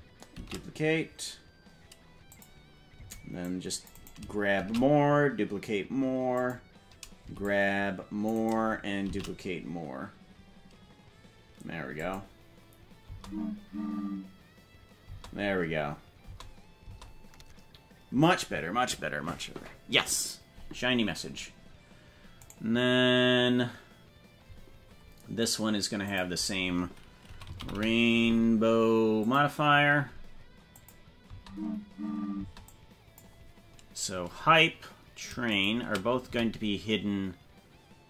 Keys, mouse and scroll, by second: 0.3 shift+d, 2.9 c, 4.5 shift+d, 7.1 c, 9.0 shift+d, 13.0 space, 15.1 space, 16.3 space, 16.9 space, 22.4 right click, 26.0-29.5 drag, 30.9 click, 31.2 space, 32.5 space, 32.7 click, 35.5 shift+right click, 36.2 s.